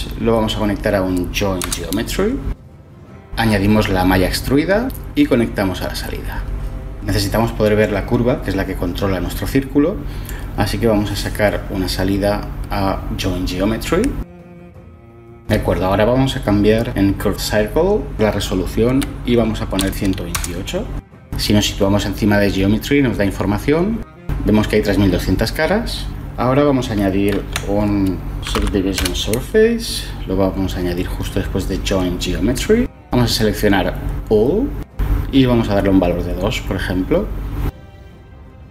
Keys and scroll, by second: 1.7 Return, 19.5-20.7 typing, 27.0 ctrl+shift+a, 27.8-28.6 typing, 28.6 Return, 37.6 m.